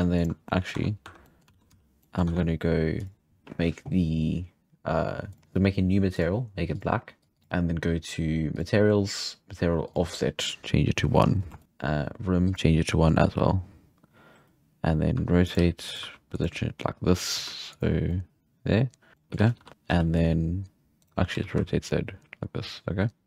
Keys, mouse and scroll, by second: 0.5 middle click, 0.8 Tab, 1.1 3, 1.3 middle click, 1.5 alt+a, 1.7 z, 2.0 middle click, 2.3 Tab, 3.0 click, 5.3 drag, 6.1-7.4 drag, 8.5-11.2 drag, 11.2-11.6 scroll up 2, 11.6 shift+middle click, 12.4-14.8 drag, 14.8-15.2 scroll down 4, 15.2 r, 15.6 g, 16.0 r, 17.9 g, 18.1-19.1 middle drag, 19.1 scroll down 2, 19.3 middle click, 19.4 g, 19.7 scroll up 4, 20.0 z, 21.0-21.4 right drag.